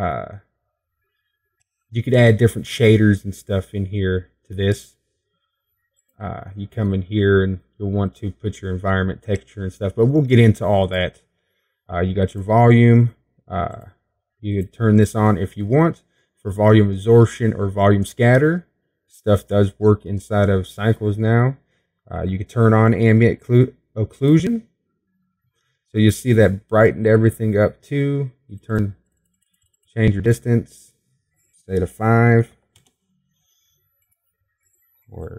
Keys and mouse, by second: 8.9-11.9 drag, 26.4-28.4 drag, 30.9-35.3 drag.